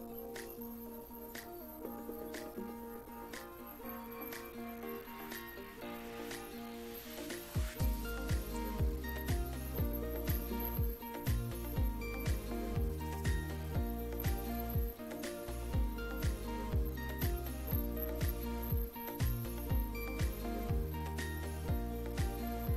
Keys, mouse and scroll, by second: 0.4-1.1 drag, 2.2 click, 5.4 click, 6.8-7.2 drag, 7.5 click, 10.2 click, 11.4 click, 11.6-13.4 typing, 12.4 click, 13.7 click, 14.9 click, 17.2 click, 18.4-19.3 typing, 21.2 ctrl+d, 21.7-22.7 ctrl+drag.